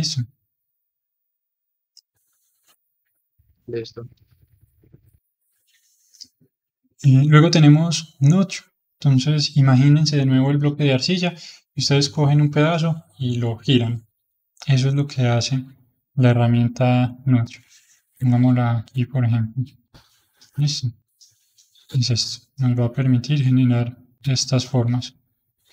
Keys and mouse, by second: 4.8-7.8 middle drag, 16.4-18.2 middle drag, 18.2-25.7 drag.